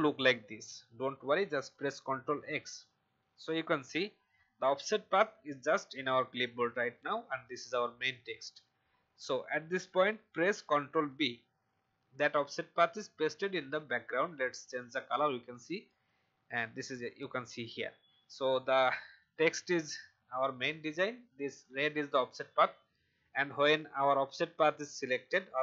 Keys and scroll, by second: 2.3 ctrl+x, 11.0 ctrl+b.